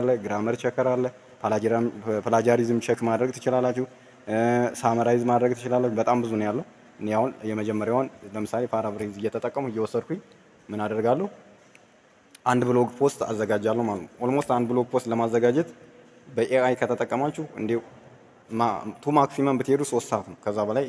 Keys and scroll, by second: 14.3 ctrl+v.